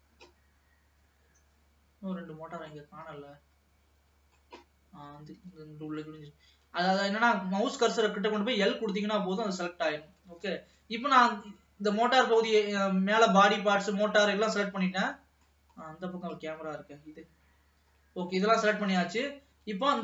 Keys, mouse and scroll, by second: 0.8-2.3 scroll up 2, 2.3-3.0 scroll down 2, 3.0-5.5 middle drag, 5.5 l, 6.2-7.3 middle drag, 7.3-8.6 scroll up 1, 8.6 l, 9.4-10.1 scroll down 2, 10.1-10.5 scroll down 1, 10.5 ctrl+s, 11.4-13.1 middle drag, 13.1-14.6 scroll down 1, 14.6-15.9 middle drag, 15.9-17.4 scroll up 2, 17.4 l, 18.3-19.2 scroll down 2, 19.2 ctrl+s.